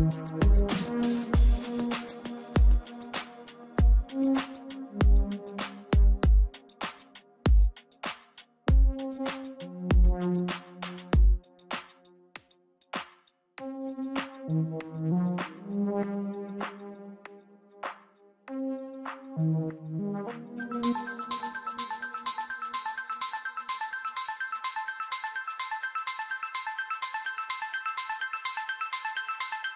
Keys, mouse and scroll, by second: 1.6 Tab, 3.0 KP_3, 4.3-5.6 scroll up 2, 5.7 g, 12.9-14.5 middle drag, 14.9 scroll up 2, 15.0 shift+middle click, 15.4-18.9 typing, 17.9 click, 18.6 click, 19.1 click, 19.2 scroll down 1, 19.3-19.7 middle drag, 19.7 click, 19.9 click, 20.3 g, 20.9 middle click, 21.5 KP_3, 21.6 scroll up 2, 22.4 g, 24.2-24.7 middle drag, 25.1 KP_3, 25.6 g, 27.4 g, 28.0-28.6 middle drag, 29.1 s.